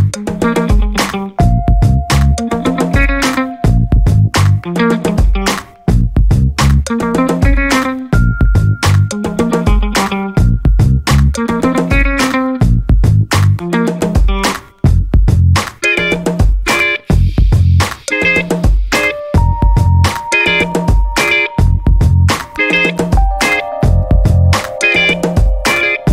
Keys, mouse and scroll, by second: 0.4 click, 1.3 ctrl+click, 2.5 click, 4.7 click, 6.3-6.6 scroll down 1, 6.8-7.1 scroll up 1, 7.8 click, 8.5 space, 8.9-13.2 drag, 13.4 scroll down 1, 14.0-18.5 drag, 18.9 0, 19.2-19.6 scroll down 2, 19.8-20.1 scroll up 1, 20.4 scroll down 1, 21.3 scroll up 2, 22.2 scroll down 2, 22.8 scroll up 2, 24.2 click, 25.0 click, 25.5 space.